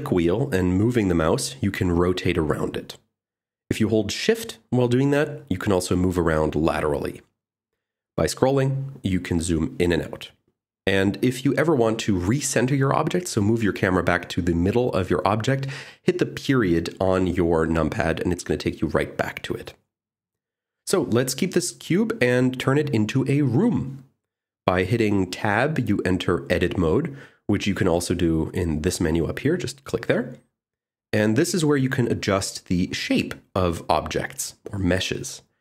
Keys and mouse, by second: 5.5 shift+middle click, 13.6 shift+middle click, 16.6 KP_Decimal, 25.3 Tab, 29.3-31.3 drag.